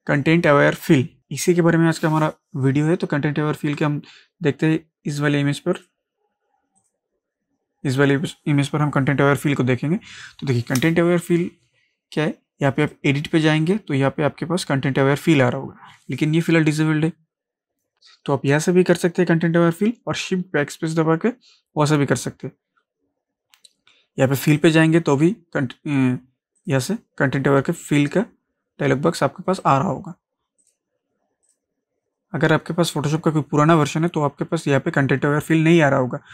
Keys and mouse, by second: 3.7 click, 12.8 click, 24.6 click, 29.6 click, 33.8 click.